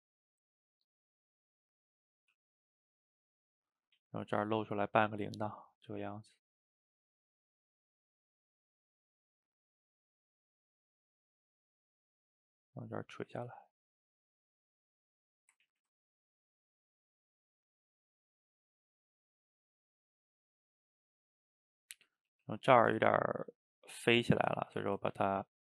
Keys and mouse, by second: 0.2-1.6 drag, 1.6 middle click, 2.2 f, 2.8 click, 3.7 middle click, 4.0 ctrl+z, 4.6 click, 5.5 middle click, 5.9-7.2 drag, 7.2 middle click, 7.8-9.3 drag, 9.3 middle click, 10.0 click, 10.7 middle click, 11.2 click, 11.5 middle click, 12.2-15.4 drag, 15.4 middle click, 15.7 ctrl+z, 15.8 ctrl+z, 16.2-17.5 drag, 17.5 middle click, 18.4 click, 18.8 middle click, 19.5-21.0 drag, 21.0-22.3 middle drag, 22.3 f, 22.8-24.0 ctrl+shift+middle drag, 24.0 click, 24.9 ctrl+z, 25.2 f.